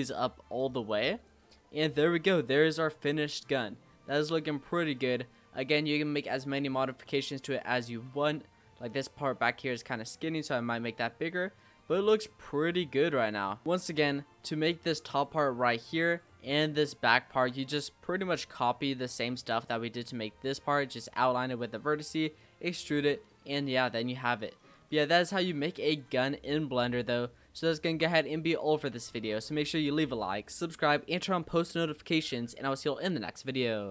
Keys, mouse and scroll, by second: 1.9 click, 2.3-2.7 scroll down 3, 2.7-3.2 middle drag, 3.2-3.5 scroll up 2, 3.5-4.7 middle drag, 4.7 scroll down 3, 5.0-8.4 middle drag, 8.4-9.4 scroll up 4, 9.4-9.8 scroll down 4, 9.8-12.6 middle drag, 12.6-13.4 scroll up 2, 13.4-15.5 middle drag, 15.5-16.3 scroll up 3, 16.3 middle drag, 16.6-17.1 scroll down 5, 17.1-17.6 shift+middle drag, 17.6-18.1 scroll up 3, 18.1-18.6 middle drag, 18.6-19.0 scroll down 3, 19.0-19.5 middle drag, 19.5 scroll up 2, 19.8 middle drag, 20.1-20.8 scroll up 2, 20.8-22.8 scroll down 3, 22.8-23.2 middle drag, 23.2 scroll down 2, 23.3-25.9 middle drag, 25.9 click, 26.3-28.2 shift+middle drag, 28.2 scroll up 2, 28.3-29.6 middle drag, 29.6 scroll up 1, 30.0-33.9 middle drag.